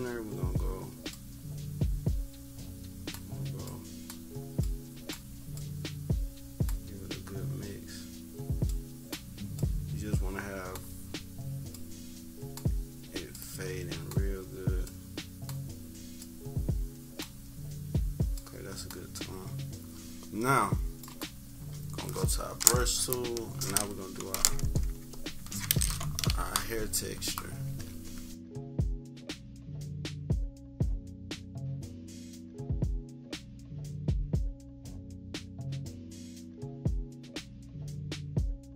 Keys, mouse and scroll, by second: 1.1-3.3 drag, 3.6 click, 4.6-6.6 drag, 8.6 click, 9.5 click, 11.7 click, 13.3 click, 15.4 click, 18.3-22.5 drag, 24.7 click, 27.1 -, 27.6 =, 27.8 =, 28.4 scroll down 2, 28.5 scroll up 2, 28.5 =, 28.9 click, 29.7 click, 30.0 click, 30.4 click, 31.1 click, 31.4 click, 32.6 click, 33.0 click, 33.8 click, 35.0 click, 35.5 -, 35.8 scroll down 2, 35.8 =, 35.9 scroll up 2, 36.4 click, 37.0 z, 37.7 click, 38.1 click.